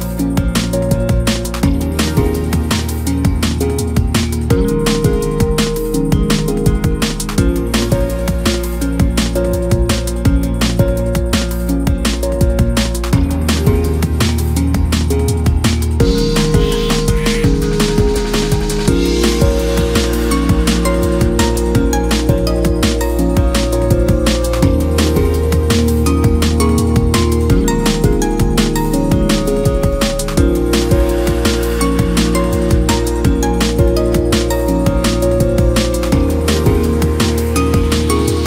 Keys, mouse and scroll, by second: 1.0 ctrl+KP_Add, 1.8 shift+middle click, 2.4-4.3 right drag, 4.3-5.8 drag, 6.7 click, 8.5 click, 9.1 click, 10.8 click, 11.5 click, 12.9-13.5 scroll down 2, 13.5 KP_1, 16.1-19.3 drag, 19.3 8, 20.3-21.2 scroll down 3, 21.2 drag, 23.6 r, 25.6-27.0 scroll down 4, 27.0-27.9 scroll down 1, 27.9-29.4 scroll up 5, 29.4 KP_1, 31.2-32.4 scroll down 3, 32.4 ctrl+z, 32.8 ctrl+z, 33.7 ctrl+z, 35.4 scroll up 1, 36.3-37.2 scroll down 2, 37.2-38.4 scroll up 2.